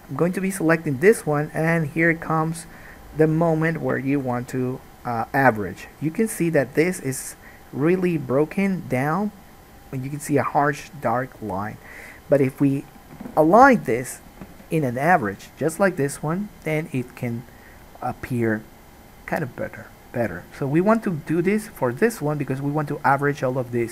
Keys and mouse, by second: 0.0-5.9 middle drag, 4.5 KP_1.